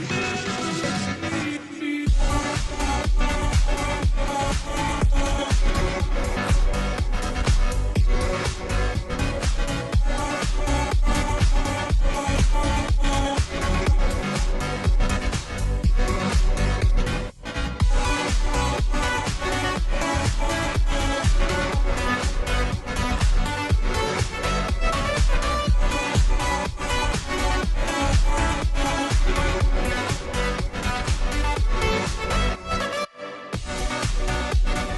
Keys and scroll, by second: 0.0-34.9 typing, 0.1 ctrl+t, 4.3 Return, 11.1 ctrl+g.